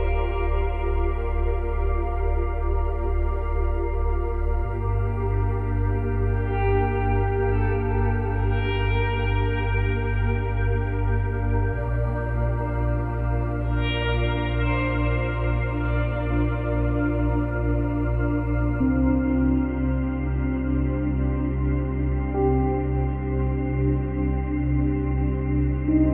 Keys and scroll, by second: 12.3 space, 15.4 space, 20.5 space, 22.1 space.